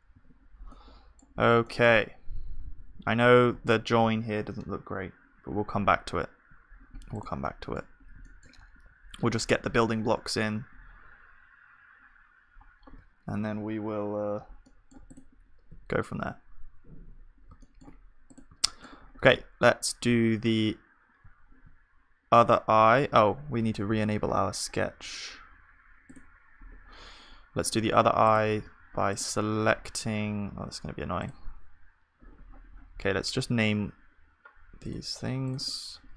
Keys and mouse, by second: 0.1 ctrl+s, 1.9 z, 2.8 z, 5.8 z, 6.7 middle click, 7.5-9.2 drag, 9.2-12.9 middle drag, 9.2 z, 14.7-15.7 middle drag, 15.7-17.6 drag, 15.7 z, 17.6-21.2 middle drag, 19.1-20.3 drag, 19.1-20.3 right drag, 19.3 z, 21.2 z, 22.7 KP_1, 23.7-28.6 middle drag, 28.6-33.2 drag, 29.7 z, 33.9-36.1 middle drag.